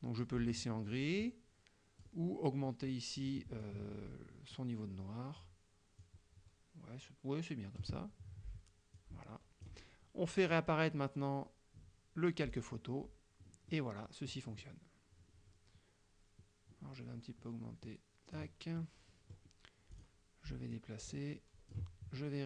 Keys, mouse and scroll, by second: 0.2-2.3 drag, 3.7 click, 6.1-8.1 drag, 9.0 click, 12.6 click, 13.8-14.9 middle drag, 17.9 click, 18.9 middle click, 20.0 click, 20.8-22.0 drag.